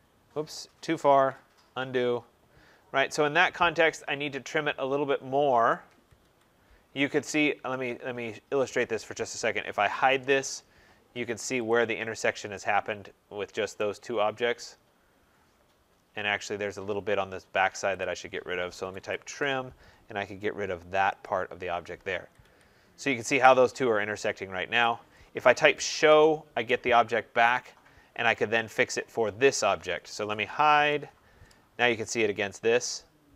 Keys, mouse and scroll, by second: 1.0 ctrl+z, 5.8 Escape, 6.1 Escape, 8.6 click, 9.3-10.4 typing, 11.6 click, 11.9 middle click, 12.0 middle click, 12.1 middle click, 12.6 scroll, 13.7 right click, 14.2-15.8 scroll, 15.9-16.4 scroll, 16.9-17.4 scroll, 17.9 click, 18.5-19.6 typing, 21.1 click, 21.9 scroll, 22.1 Escape, 22.3 Escape, 22.7 middle click, 22.9 middle click, 23.8 scroll, 24.7 right click, 25.3-26.3 typing, 28.4-31.1 typing, 28.9 click, 31.6 middle click, 31.6 middle click, 31.7 middle click, 32.9-33.3 typing, 33.2 scroll.